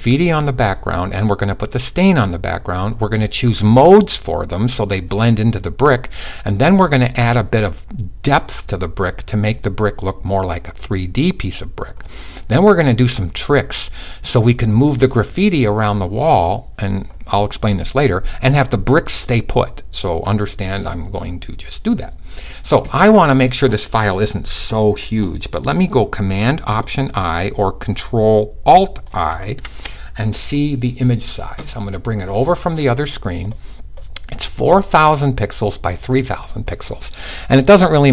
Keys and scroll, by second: 29.1 alt+super+i.